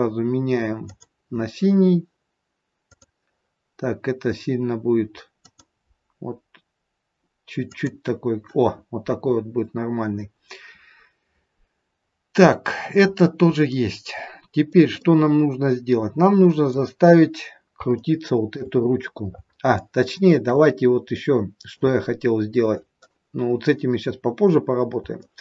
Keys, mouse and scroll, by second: 2.8 click, 9.3-9.9 scroll up 4, 12.0-12.6 scroll down 3, 12.6-13.5 scroll down 3, 13.5 middle click, 13.5 scroll down 2, 14.9 middle click, 17.9 shift+middle click, 18.7 scroll up 4, 19.8 shift+middle click, 20.7 scroll up 2, 21.1 middle click, 22.0 scroll up 2, 24.4 scroll down 2, 25.2 shift+middle click.